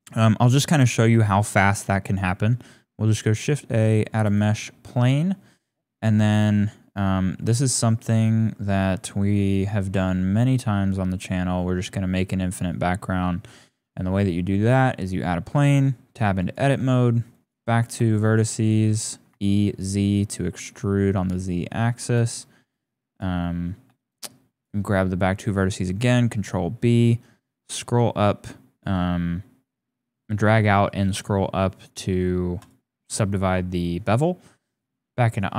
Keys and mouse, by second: 1.2 shift+a, 5.2 click, 6.1 click, 6.4 g, 10.5-10.9 drag, 11.2 shift+click, 11.5-11.9 drag, 12.0-12.4 shift+drag, 12.8 shift+click, 13.0 shift+right click, 14.9 right click, 15.6 Tab, 16.4 click, 17.4 click, 18.3 shift+click, 19.0 e, 22.9 click, 24.1 shift+click, 25.9 ctrl+b, 33.5 Tab, 34.6 click.